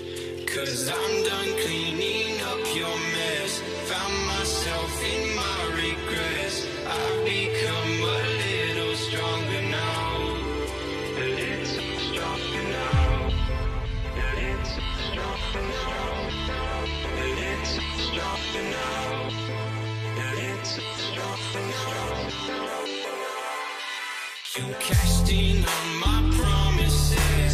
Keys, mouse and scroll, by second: 7.8 double click, 10.9 alt+BackSpace, 11.2-12.2 typing, 12.1 ctrl+ى, 15.1 ctrl+ف, 16.6 ctrl+click, 21.1 Return, 21.7 Up, 21.8 Up, 22.6 ctrl+ظ, 23.0 ctrl+ظ, 24.0 ctrl+ف, 24.7 alt+scroll up 1, 25.7 ctrl+ف, 26.6 ctrl+click.